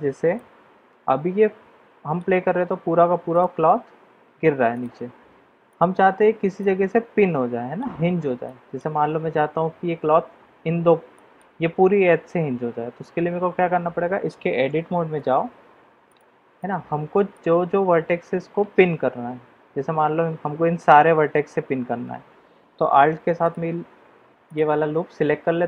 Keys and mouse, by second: 0.4-2.2 middle drag, 3.3 click, 4.7 click, 5.6 click, 6.6-7.8 middle drag, 8.4 middle click, 11.1 middle click, 15.2 Tab, 16.0 click, 16.6 middle click, 23.4 alt+click.